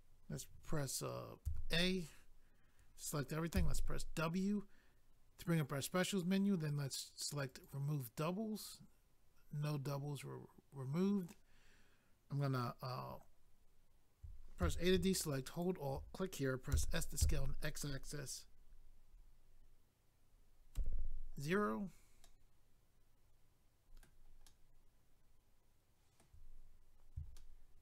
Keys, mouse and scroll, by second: 7.4 click, 7.6 click, 9.0 scroll down 1, 10.5-11.8 scroll up 1, 15.5 alt+click, 16.7 s, 21.4 click, 21.5 click, 21.8 scroll down 1, 22.2 middle click, 24.5 middle click, 26.6 scroll up 1, 27.4 shift+middle click.